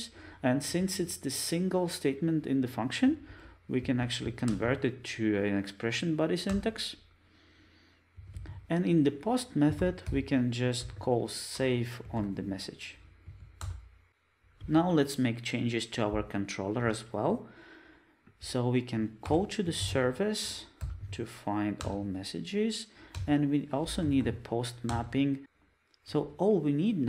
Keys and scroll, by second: 4.5 alt+Return, 11.6 Return, 20.5 Return.